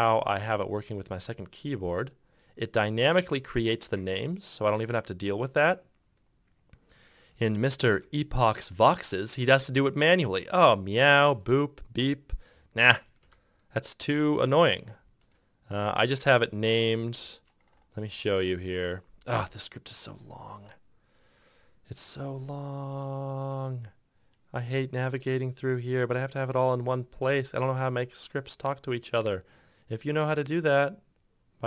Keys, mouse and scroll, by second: 8.0 ctrl+F1, 13.5 ctrl+F2, 17.1 ctrl+F1, 17.3 ctrl+F6.